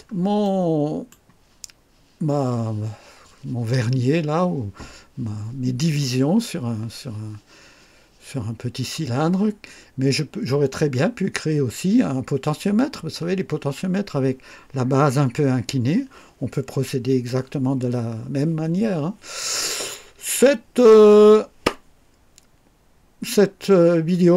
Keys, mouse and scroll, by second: 0.4-1.2 right drag.